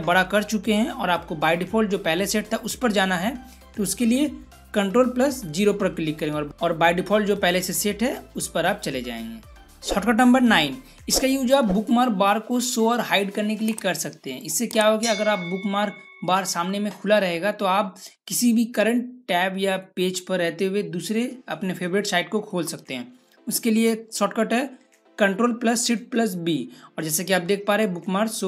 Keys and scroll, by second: 5.4 ctrl+0, 26.2 ctrl+shift+b.